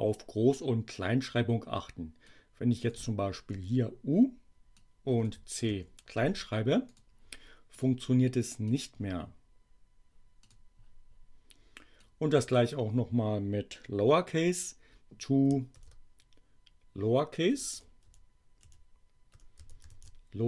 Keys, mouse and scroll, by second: 2.2 click, 3.4 u, 4.8 click, 5.6 c, 6.8 click, 7.7 click, 8.5 click, 10.4 click, 12.0 click, 15.7 shift+l, 17.4 Delete, 19.3-20.4 typing.